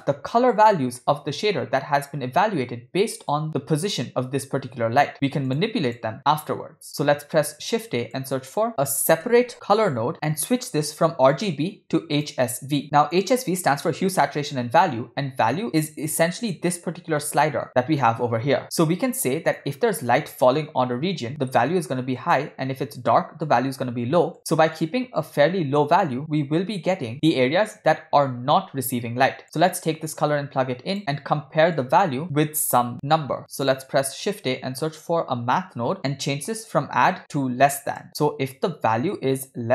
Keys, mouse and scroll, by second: 3.2 click, 3.7 g, 5.9 click, 7.1 shift+a, 10.8-12.3 drag, 12.8 click, 16.4 click, 22.1 click, 24.3 click, 29.8-31.2 drag, 31.7-33.6 drag, 34.0 shift+a, 36.5-38.0 drag, 38.0 middle click, 38.8-39.7 drag.